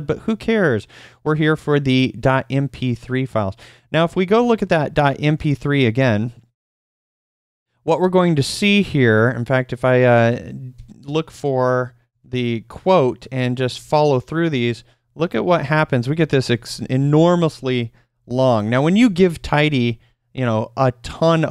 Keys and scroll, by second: 4.1-8.8 typing, 10.5-15.5 typing.